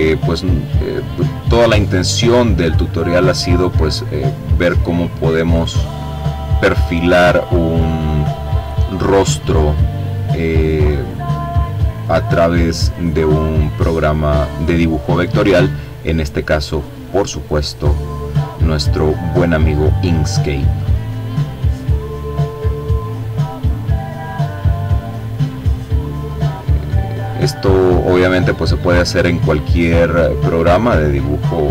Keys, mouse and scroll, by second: 1.7-3.4 drag, 4.3-5.6 drag, 7.0-9.2 drag, 9.4-11.0 drag, 11.2-12.8 drag, 13.3-15.0 drag, 17.4 click, 18.4-20.7 drag, 21.1 click, 23.8-25.3 drag, 25.5-26.9 drag, 27.1 click, 31.0 click.